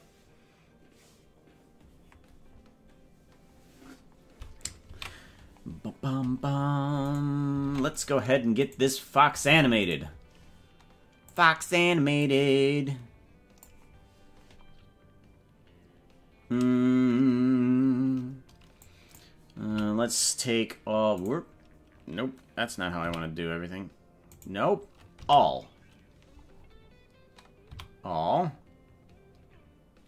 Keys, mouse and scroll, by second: 5.3 ctrl+s, 7.0 right click, 7.6 ctrl+Tab, 7.9 right click, 8.6 right click, 9.4 ctrl+Tab, 9.9 right click, 11.2 click, 12.3-13.7 drag, 18.8 click, 19.6 s, 23.1 s, 26.5-26.8 scroll down 5, 27.6 a.